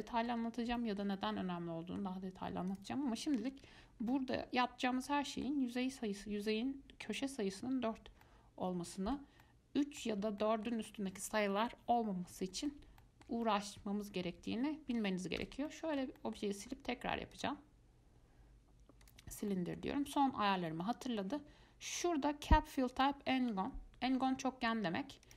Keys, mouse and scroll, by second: 2.9 click, 4.3-8.3 middle drag, 8.4-15.6 middle drag, 15.6 x, 15.9-17.5 middle drag, 17.5-19.7 drag, 19.7-23.1 middle drag, 23.1-25.3 drag.